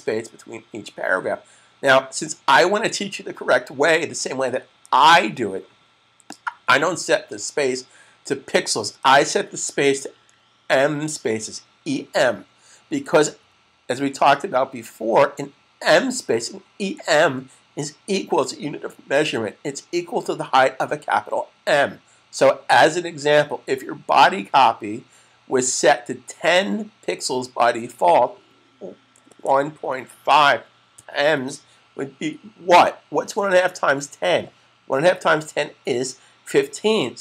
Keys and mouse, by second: 6.0 click, 29.2-31.3 typing.